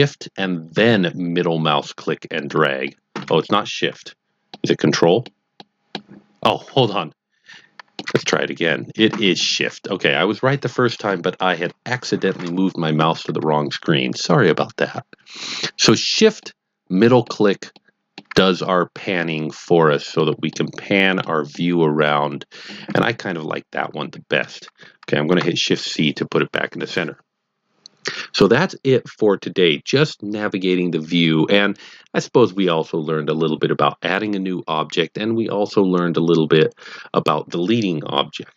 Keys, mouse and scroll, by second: 1.3 shift+middle click, 2.8 shift+double middle click, 4.5 ctrl+middle click, 5.5 ctrl+double middle click, 6.9 shift+middle click, 8.2 shift+double middle click, 16.4 shift+middle click, 17.7 shift+middle click, 18.5-18.9 scroll down 2, 19.1 shift+middle click, 20.5 shift+double middle click, 21.8 middle click, 25.3 shift+c.